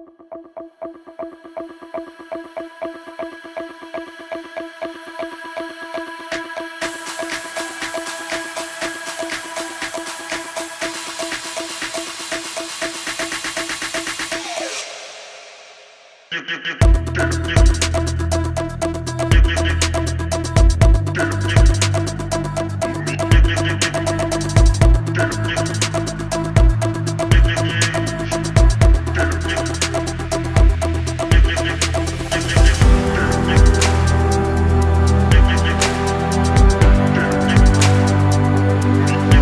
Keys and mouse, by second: 0.9 shift+middle click, 1.8 click, 3.1 Tab, 3.8 shift+middle click, 4.5-6.2 middle drag, 7.0 middle click, 7.5 a, 7.8 middle click, 9.2 shift+middle click, 13.8 click, 14.0 alt+click, 14.9 alt+shift+click, 15.5 alt+shift+click, 16.3 alt+shift+click, 16.9 alt+shift+click, 17.2 ctrl+e, 18.1 a, 18.5 middle click, 19.7 click, 20.2 alt+shift+click, 20.9 alt+shift+click, 21.4 alt+shift+click, 22.0 shift+click, 22.3 ctrl+e, 23.2 a, 23.6 middle click, 24.3 alt+click, 24.9 alt+shift+click, 25.9-26.9 middle drag, 27.3 shift+middle click, 27.8 middle click, 28.4 alt+shift+click, 28.8 middle click, 29.9 alt+shift+click, 30.3 alt+shift+click, 30.7 ctrl+e, 31.7 a, 31.9 middle click, 33.1 alt+click, 33.3 alt+click, 33.7 middle click, 34.7 alt+shift+click, 35.2 alt+shift+click, 35.5 middle click, 36.2 alt+shift+click, 36.8 shift+click, 37.4 ctrl+e, 38.0 a, 38.4 click.